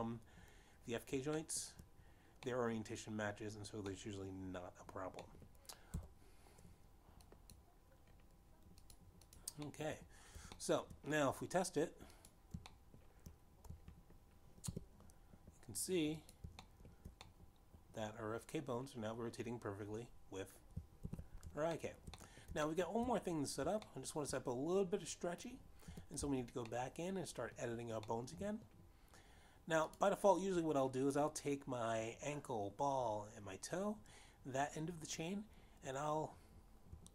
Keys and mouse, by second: 3.5 shift+middle click, 4.6 middle click, 6.1 middle click, 7.5 middle click, 7.9 Tab, 9.5 click, 11.1 click, 11.5 click, 11.8 middle click, 12.1 Tab, 12.8 shift+middle click, 14.3 click, 15.0 shift+middle click, 16.8 g, 18.4 click, 18.9 shift+middle click, 19.4 middle click, 23.1 alt+g, 24.0 shift+middle click, 24.3 middle click, 24.9 shift+middle click, 26.0 shift+middle click, 28.1 Tab, 28.9 middle click, 30.4 middle click, 31.9 click.